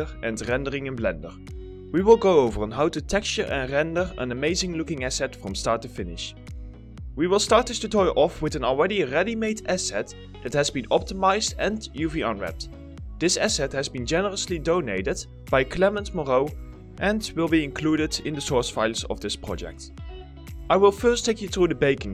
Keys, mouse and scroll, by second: 0.1 alt+click, 0.2 alt+s, 0.3 middle click, 0.5 alt+click, 0.6 alt+middle click, 0.8 s, 1.4 alt+middle click, 1.7 s, 2.4 alt+middle click, 4.6 s, 4.7 middle click, 4.8 s, 5.1 middle click, 5.3 s, 6.7 middle click, 11.1 middle click.